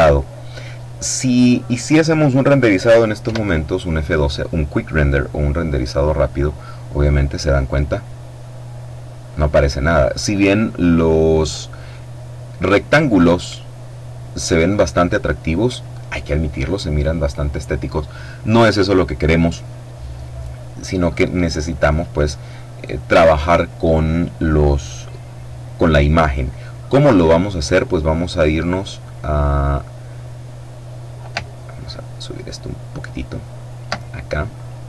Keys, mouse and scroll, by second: 2.8 F12, 31.3-33.8 alt+drag, 34.1 click.